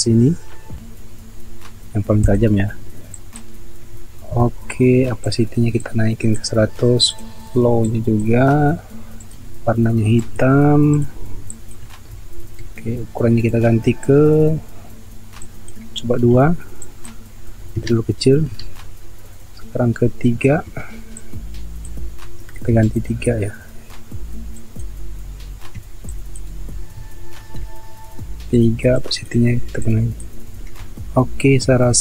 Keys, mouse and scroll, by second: 4.2 ctrl+z, 12.4 ctrl+z, 16.4 2, 18.2 ctrl+alt+z, 20.7 3, 22.5 ctrl+alt+z, 25.7 3, 27.4 ctrl+alt+z, 31.7 ctrl+alt+z.